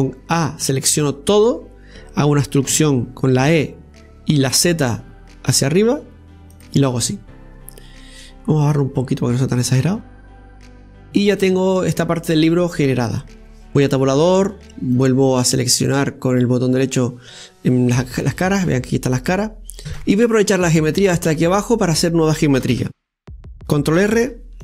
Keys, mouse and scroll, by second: 0.4 Tab, 1.2 a, 2.0 middle click, 2.4-3.6 scroll up 1, 3.6 e, 7.8-9.9 middle drag, 9.9 click, 11.1-11.4 scroll up 2, 11.4-13.1 shift+middle drag, 12.8 scroll down 1, 13.2-14.5 middle drag, 14.5 Tab, 15.3 right click, 15.8 click, 16.1-18.8 right drag, 18.8 click, 19.2 right click, 19.7 scroll down 2, 21.3 scroll down 2, 21.5-23.6 middle drag, 23.6 KP_7.